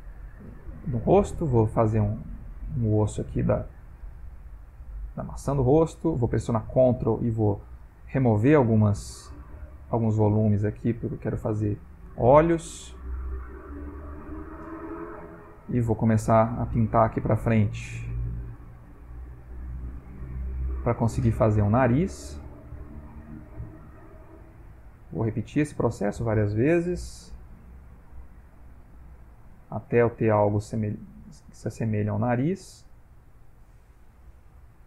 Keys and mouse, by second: 3.5 click, 5.8 ctrl+click, 6.4 ctrl+click, 6.7 ctrl+click, 7.1 ctrl+click, 7.4 ctrl+click, 7.7 ctrl+click, 8.0 ctrl+click, 8.3 ctrl+click, 8.6 ctrl+click, 9.3 ctrl+click, 9.8 ctrl+click, 11.0 ctrl+click, 12.6 ctrl+click, 14.3 click, 14.7 click, 14.9 click, 15.1 click, 15.2 click, 15.5 click, 15.9 click, 16.0 click, 16.3 click, 16.5 click, 16.8 click, 17.0 click, 17.2 click, 17.3 click, 17.6 click, 17.8 click, 18.0 click, 18.1 click, 19.4 ctrl+middle click, 19.9 click, 20.1 click, 20.3 click, 20.6 click, 20.8 click, 20.9 click, 21.2 click, 21.6 click, 22.0 click, 22.8 click, 23.1 click, 24.0 click, 24.4 click, 25.2 f, 26.9 shift+f, 28.0 click, 28.6 click, 28.9 click, 29.0 click, 29.4 click, 29.9 click, 30.2 click, 30.6 click, 30.7 click, 30.9 click, 32.5 click, 32.9 click, 33.4 click, 34.6 click.